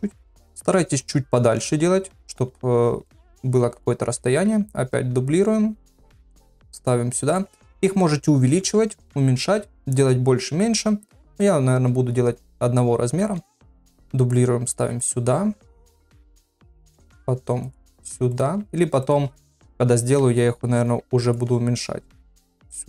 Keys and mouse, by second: 0.5 r, 3.0 shift+middle click, 4.3 shift+d, 6.1 r, 11.1 shift+middle click, 13.2 shift+d, 15.4 r, 16.2 shift+middle click, 16.6 shift+d, 17.9 r, 18.5 g, 20.4 shift+d, 21.5 r, 22.6 g.